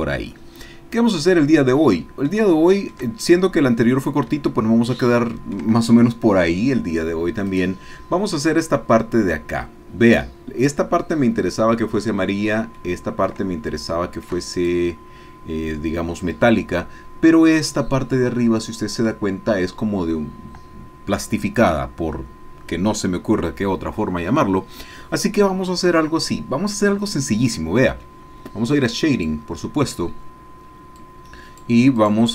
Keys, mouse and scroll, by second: 0.2-0.7 scroll down 2, 1.3-2.0 scroll down 2, 2.2-4.4 shift+middle drag, 4.5-5.7 shift+middle drag, 7.7 click, 12.8 click, 13.9 shift+click, 16.2 click, 29.3 click, 31.0 click, 32.0 click.